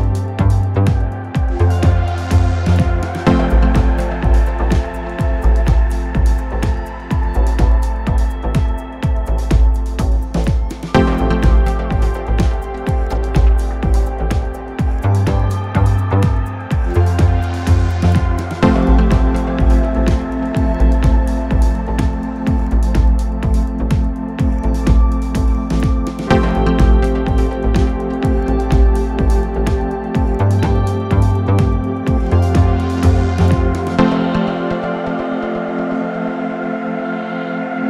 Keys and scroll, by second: 4.9 ctrl+z, 6.0 3, 7.2 ctrl+2, 7.8 ctrl+F1, 8.8 ctrl+F1, 10.1 ctrl+2, 10.3 ctrl+F1, 18.2 4, 21.3 5, 22.9 4, 24.5 4, 24.9 5, 28.4 4, 37.2 ctrl+z.